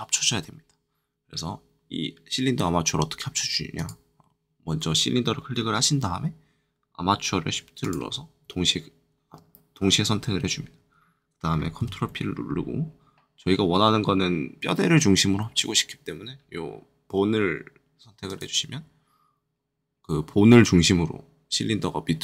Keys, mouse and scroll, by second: 3.7-7.3 drag, 11.8 ctrl+shift+p, 18.2-22.2 drag.